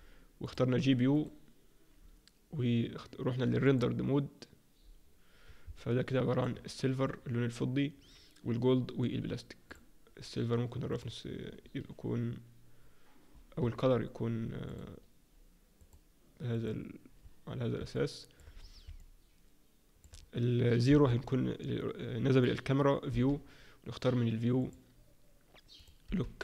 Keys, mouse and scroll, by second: 0.8 click, 4.3 click, 5.7 alt+middle click, 9.7 click, 10.9 click, 14.7 click, 17.9 middle click, 18.6-19.0 scroll down 3, 19.0 middle click, 20.9 KP_0, 23.1 n, 24.6 click, 25.7 click, 26.0 n.